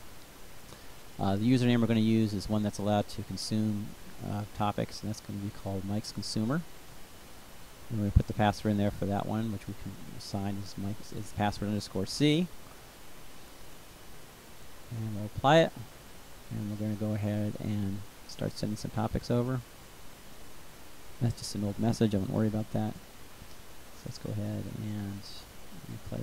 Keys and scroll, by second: 2.5-5.4 typing, 8.2-11.1 typing.